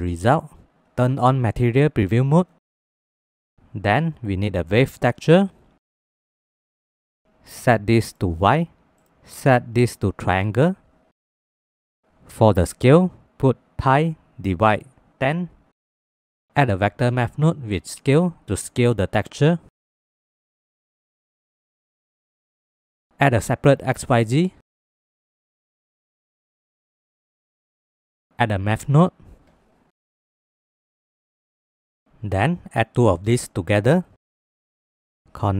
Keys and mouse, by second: 3.2 shift+click, 4.0 shift+a, 16.2 click, 16.5 middle click, 16.9 click, 17.3 shift+a, 19.8-21.3 drag, 22.8-25.2 drag, 26.1 middle click, 26.6 middle click, 26.9 click, 27.1 shift+click, 28.2 middle click, 28.5-30.5 drag, 31.7 click, 32.0 click, 32.2 drag, 32.3-33.3 drag, 34.0 click, 34.9 middle click.